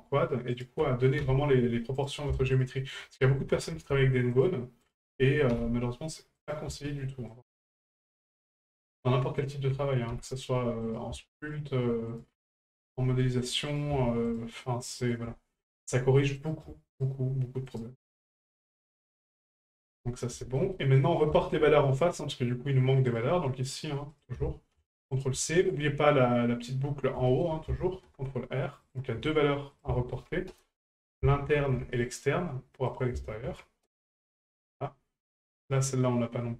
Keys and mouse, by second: 0.5 shift+right click, 2.0 right click, 2.5 shift+right click, 4.3 shift+right click, 4.8 shift+right click, 6.4 right click, 7.3 shift+right click, 8.1 ctrl+z, 8.5 shift+right click, 9.4 shift+right click, 10.8 right click, 11.4 shift+right click, 12.1 shift+right click, 13.2 middle click, 13.7 right click, 14.3 shift+right click, 15.0 shift+right click, 16.4 right click, 16.9 shift+right click, 17.7 shift+right drag, 18.3 shift+right click, 19.3 middle drag, 19.3-36.5 f, 19.7 shift+middle drag, 20.0 middle drag, 20.4 shift+middle drag, 20.7 middle drag, 21.3 shift+middle drag, 23.1 right click, 24.2-25.3 ctrl+drag, 25.4 shift+middle drag, 27.3 shift+middle click, 29.7 ctrl+click, 32.9-33.9 drag, 35.6 right click.